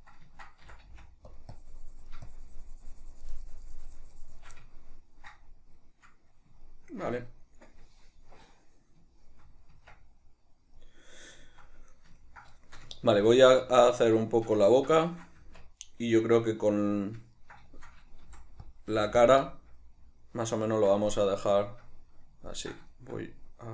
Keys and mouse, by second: 0.8 c, 1.7-4.8 drag, 4.8-18.8 ctrl+middle drag, 9.8 Tab, 15.5 Tab, 18.4 f, 18.8 click, 19.0 f, 19.4 click, 19.6-23.7 shift+middle drag.